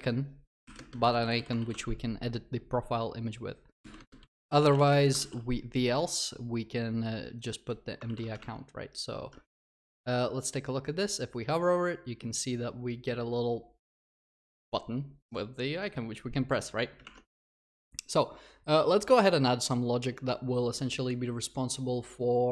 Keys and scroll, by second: 1.7 ctrl+s.